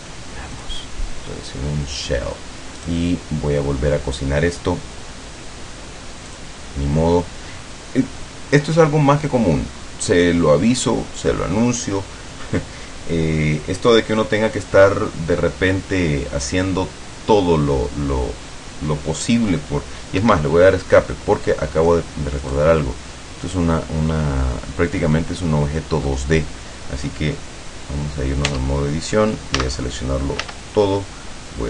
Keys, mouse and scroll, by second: 0.6 click, 2.9 right click, 6.3 click, 20.3 Escape, 21.1-22.2 middle drag, 22.5 right click, 23.1 scroll down 1, 23.6-26.3 middle drag, 28.6 Tab, 29.7 a, 30.5 a.